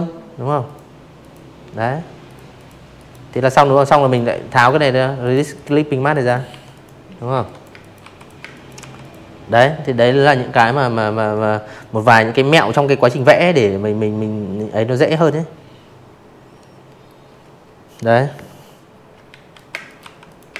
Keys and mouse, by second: 0.9 click, 1.4 click, 2.1 click, 2.5 click, 3.0 click, 3.4 Delete, 3.6 click, 4.2-5.7 typing, 4.4 click, 4.7 click, 5.1 click, 5.5 click, 5.9 click, 16.3-17.8 typing, 16.5 click, 16.8 click, 17.2 click, 17.6 click, 17.9 click, 18.4-18.9 drag, 19.9 Delete, 20.2 click.